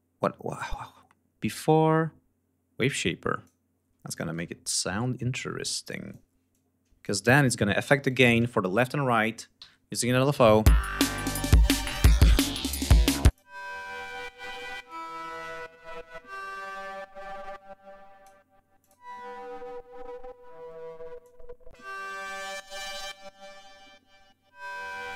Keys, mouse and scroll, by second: 0.1 click, 2.7 click, 5.7 click, 6.4 click, 7.1 ctrl+y, 7.7 g, 8.0 click, 10.2 l, 10.9 click, 13.2 click, 14.8 click, 17.1-18.3 drag, 18.7 click, 21.1 click, 24.9 click.